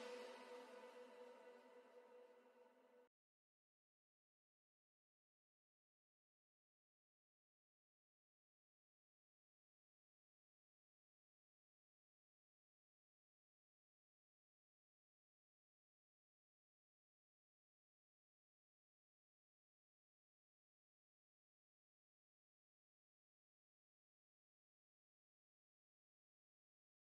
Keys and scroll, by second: 2.4-10.7 typing.